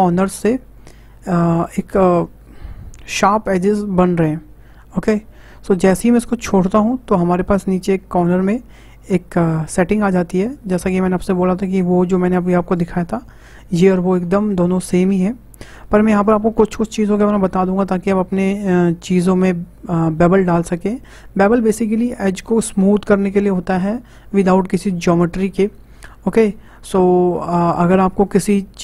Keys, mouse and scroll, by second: 9.8-12.8 drag.